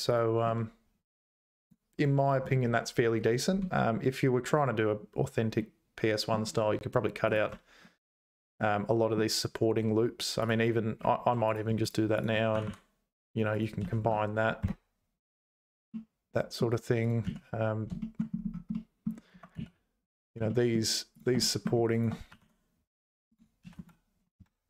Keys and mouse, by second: 5.6 middle click, 7.3 click, 7.5 Tab, 8.5 middle click, 9.6 2, 12.1 shift+click, 12.5 g, 13.8 a, 14.0 space, 15.9 click, 17.0 click, 17.3 z, 18.0 click, 18.8 middle click, 19.6 z, 20.5 shift+middle click, 21.4 middle click, 21.5 click, 22.3 g, 23.6 a, 23.8 space.